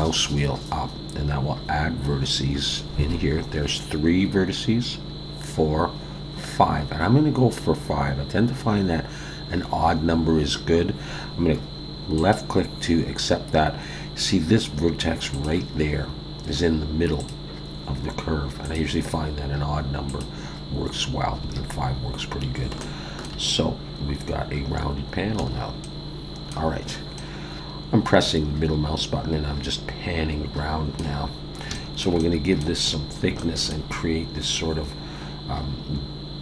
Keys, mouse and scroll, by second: 15.3 click, 17.2 click, 18.6 click, 20.1 click, 21.4 alt+a, 21.8-22.6 scroll down 2, 22.8 shift+middle click, 25.4 a, 25.8 middle click, 27.1 middle click, 31.3-31.7 scroll up 2, 31.7 shift+middle click, 32.2 middle click, 32.9-33.3 scroll up 2, 33.4 shift+middle click, 33.9-35.3 scroll up 9.